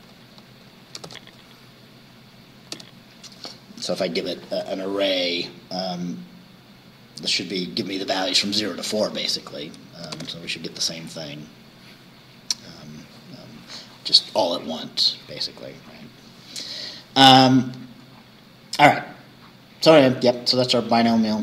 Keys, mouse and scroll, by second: 1.1 shift+9, 2.8 5, 8.8 Right, 10.2 shift+Return, 11.2-11.5 scroll down 1, 18.2 scroll up 1, 20.2-21.0 scroll down 3.